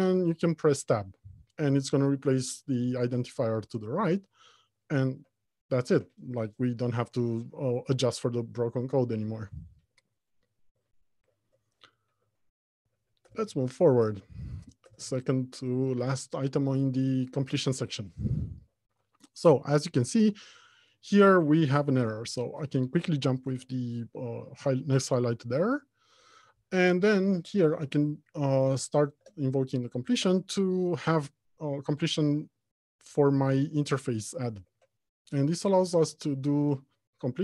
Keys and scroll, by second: 0.0 Tab, 12.4 alt+Home, 12.9 Left, 22.3 F2, 29.8 ctrl+space.